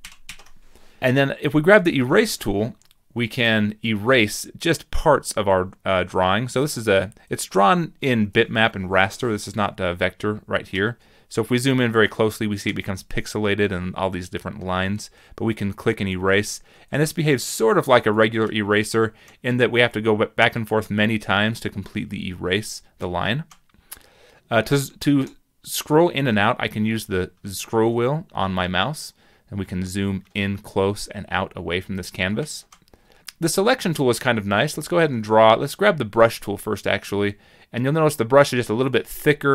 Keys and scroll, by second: 1.0 ctrl+z.